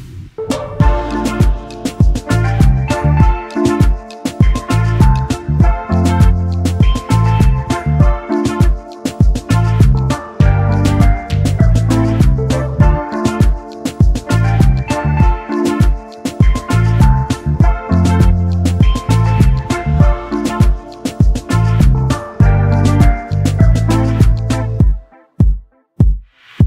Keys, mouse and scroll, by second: 0.2 shift+click, 2.1 double click, 4.0 shift+click, 6.8 shift+click, 7.2-7.8 alt+scroll down 1, 9.0-9.4 alt+scroll up 1, 9.4-9.8 alt+scroll down 1, 10.0 double click, 11.9-12.6 typing, 13.2-13.7 alt+scroll up 1, 14.0 double click, 14.7 double click, 15.0 double click, 16.8 double click, 19.2 alt+scroll down 1, 19.7 alt+scroll down 1, 20.0 alt+scroll up 1, 24.5-24.9 alt+scroll down 1, 25.2 space, 25.7-26.2 alt+scroll down 1, 26.2 i, 26.5 scroll up 1.